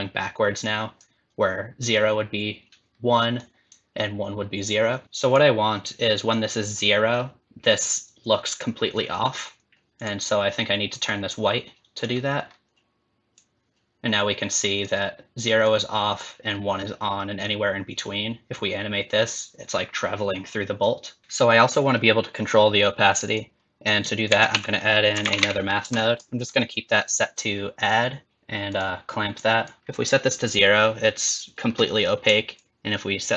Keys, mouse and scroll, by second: 0.6 click, 3.4 click, 5.0 click, 10.0 click, 13.4 click, 15.6 click, 17.4 click.